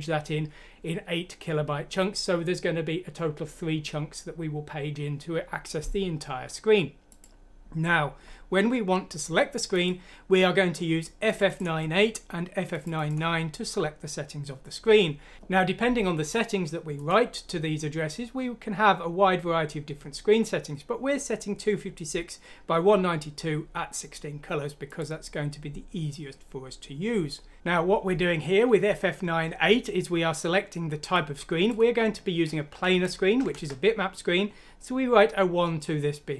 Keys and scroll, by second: 32.7 Right, 32.9 Left, 33.4 Left.